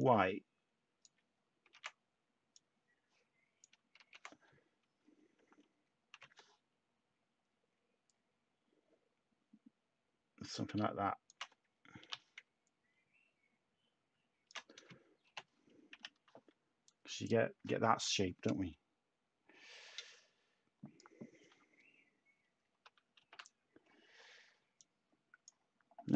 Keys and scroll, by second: 0.8 ctrl+z, 1.6 ctrl+x, 3.9 ctrl+z, 6.1 h, 10.9 h, 11.9 t, 15.2 /, 15.9 Tab, 23.2 a.